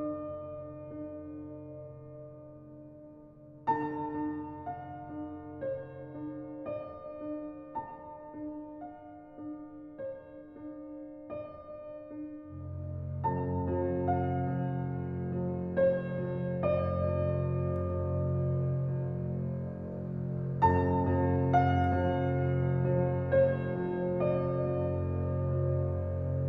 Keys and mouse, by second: 0.3 Tab, 1.0 ctrl+r, 4.6 ctrl+r, 10.4 click, 11.1 ctrl+r, 16.4 click, 16.7 Tab, 17.0 click, 17.8-19.3 drag, 19.9 click, 20.2 click, 21.2 click, 22.1-23.6 drag, 24.6 click, 25.9 click.